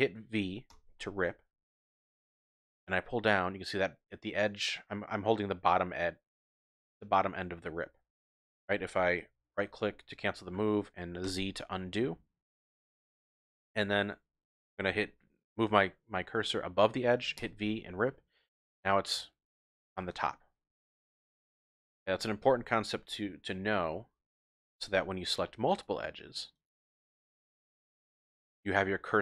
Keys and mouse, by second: 0.7 v, 8.2 click, 11.2 ctrl+z, 17.4 v, 22.0 click, 22.4 ctrl+z, 23.9 shift+middle click, 24.9 shift+click, 26.6 shift+click, 26.6 typing, 27.3 shift+click, 28.0 shift+click.